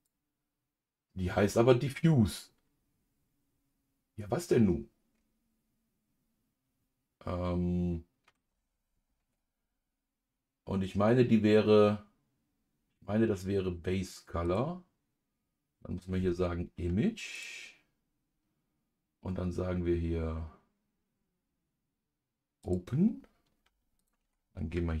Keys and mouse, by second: 14.4-17.4 drag, 22.7-25.0 drag.